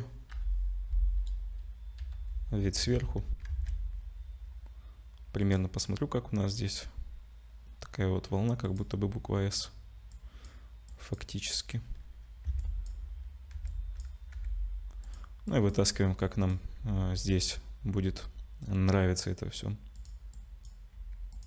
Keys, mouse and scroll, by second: 2.0 /, 2.0 KP_7, 2.9 Tab, 3.5 ctrl+s, 10.1 click, 10.9 click, 12.5 a, 12.6 click, 13.5 1, 13.7 click, 14.4 g, 15.5 click, 16.2 click, 17.3 g, 20.3 click, 20.9 g.